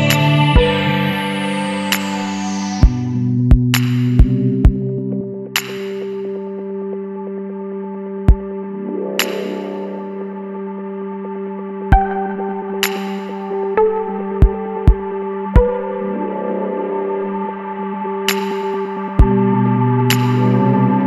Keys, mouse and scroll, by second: 0.8 click, 1.9 KP_5, 2.1 KP_Enter, 3.2-4.0 scroll up 2, 5.2 click, 6.4 click, 6.9 KP_1, 7.2 KP_2, 7.6 KP_Enter, 8.6-9.0 scroll down 1, 9.4 click, 10.5 click, 12.7 click, 13.9 KP_1, 14.1 KP_5, 16.1-16.4 scroll down 1, 17.1 scroll up 2, 17.5 scroll down 2, 19.0 click, 20.7-21.0 middle drag, 20.8-21.0 drag.